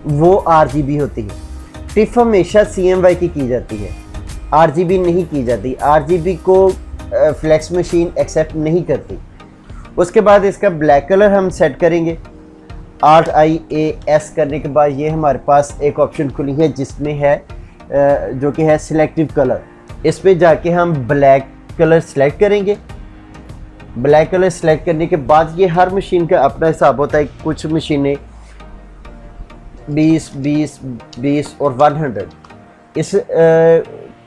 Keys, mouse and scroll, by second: 12.9 alt+i, 13.1-14.2 typing, 21.1 click, 29.7 Tab, 31.8-32.5 typing.